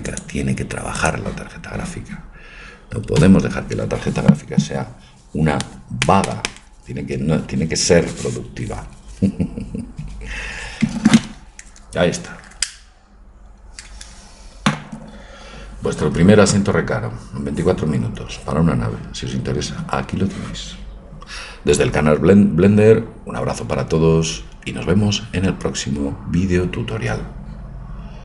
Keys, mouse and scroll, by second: 3.3-28.2 drag.